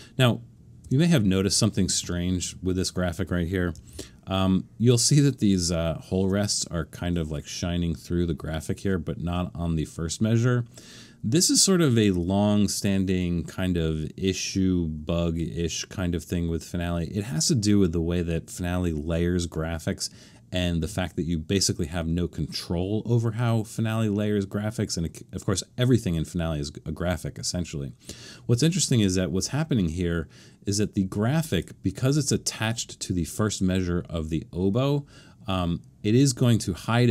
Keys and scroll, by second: 0.8 BackSpace, 3.9 super+=.